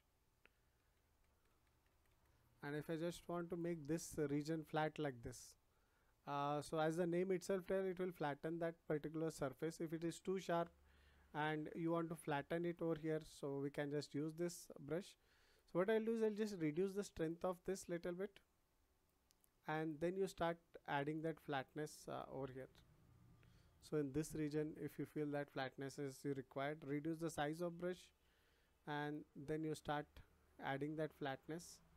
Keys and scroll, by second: 10.6 ctrl+z, 26.7 [.